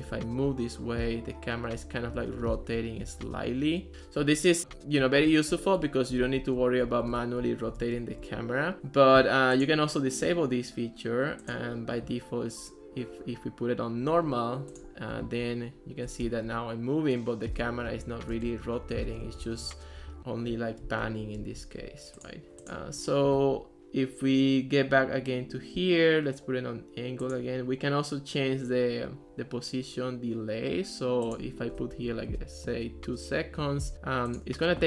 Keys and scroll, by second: 0.0-8.8 typing, 15.5 a, 16.6-22.1 typing, 32.0 2, 32.2 Return.